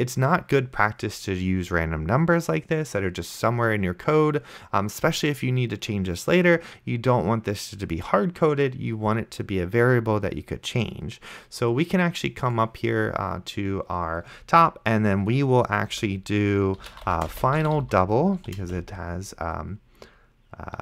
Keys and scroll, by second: 16.2 Return, 16.6-18.7 typing.